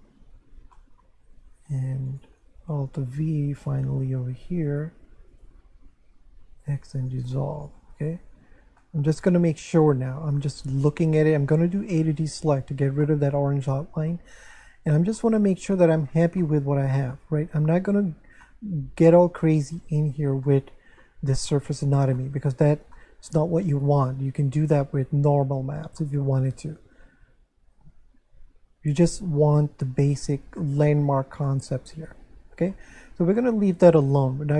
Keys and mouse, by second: 0.7 shift+middle click, 1.4 Tab, 2.1 right click, 3.0 alt+v, 3.7 click, 4.7 right click, 5.3 shift+right click, 6.7 x, 7.0 click, 7.8 Tab, 8.8 shift+middle click, 11.8 a, 13.0 middle click, 15.2 middle click, 16.4 middle click, 18.4 middle click, 20.5 middle click, 22.2 middle click, 24.1 middle click, 26.0 middle click, 30.6 shift+middle click, 33.3 middle click.